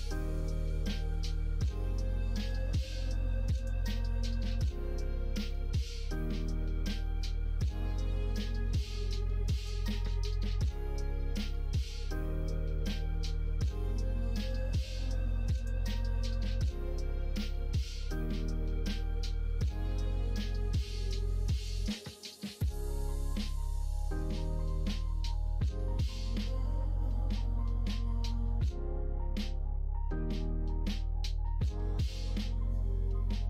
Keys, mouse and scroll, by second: 1.7 middle click, 2.2 g, 3.7 middle click, 5.0 middle click, 5.3 click, 5.6 middle click, 6.1 g, 7.5 middle click, 7.9 middle click, 9.3 middle click, 9.7 middle click, 10.5 g, 11.7 middle click, 12.9 middle click, 13.6 middle click, 13.9 g, 16.5 g, 18.0 middle click, 19.0 click, 20.2 g, 20.6 middle click, 21.5 click, 21.7 middle click, 22.1 g, 23.3 click, 23.6 g, 26.1 click, 27.2 Tab, 27.6 middle click, 28.2 middle click.